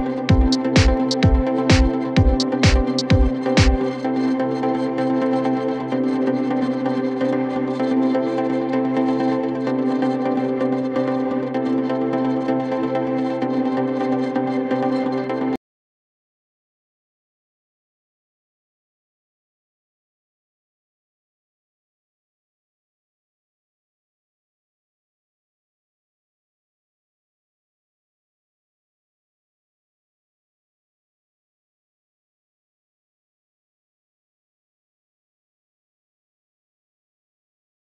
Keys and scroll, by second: 17.0 ctrl+z, 21.9 w, 24.2 shift+F2, 24.5 Escape, 33.8 F9.